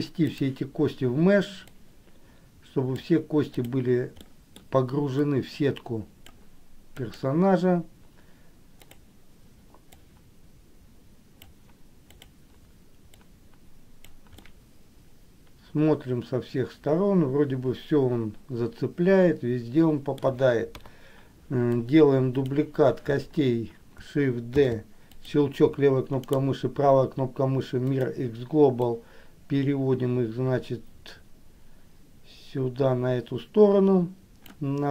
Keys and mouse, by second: 0.6 click, 2.0-3.2 drag, 3.8 click, 4.4 middle click, 5.3-6.5 drag, 10.2-11.7 drag, 12.3 click, 13.4-14.5 drag, 14.7-20.3 middle drag, 20.9 KP_1, 22.1 click, 24.8 shift+d, 26.5-28.2 right drag, 29.1-34.7 drag.